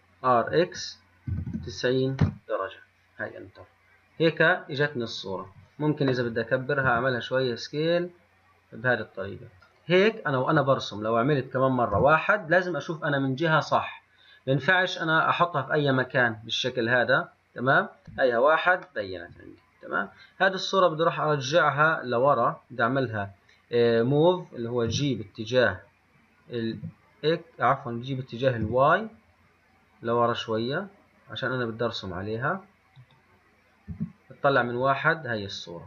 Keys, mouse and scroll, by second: 7.0 s, 9.8-12.0 middle drag, 12.0 KP_1, 18.2 KP_1, 19.1-25.0 middle drag, 25.0 g, 34.0 KP_1.